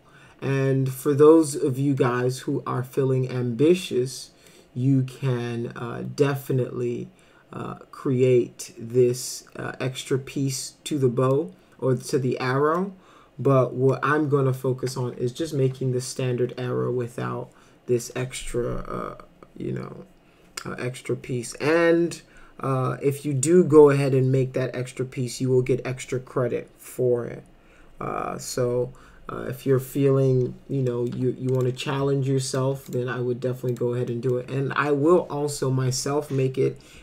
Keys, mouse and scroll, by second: 1.5 middle click, 3.9 middle click, 10.9-11.3 middle drag, 12.1 middle click, 13.9 middle click, 30.9 middle click, 31.1 w, 31.6 click, 32.5 ctrl+click, 32.9 right click, 33.7 click, 34.1 middle click.